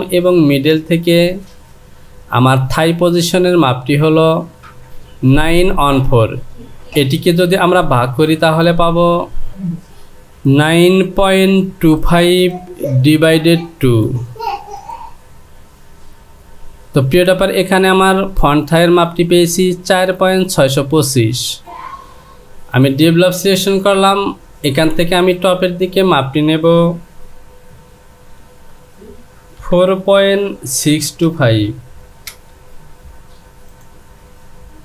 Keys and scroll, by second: 27.7 Down, 30.2 KP_Decimal, 32.3 Return.